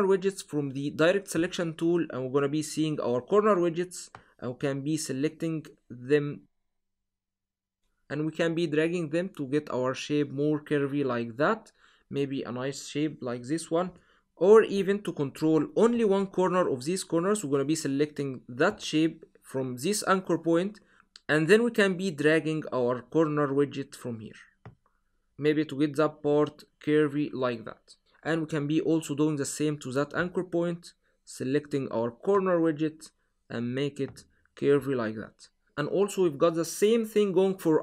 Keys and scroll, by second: 13.6 super+z.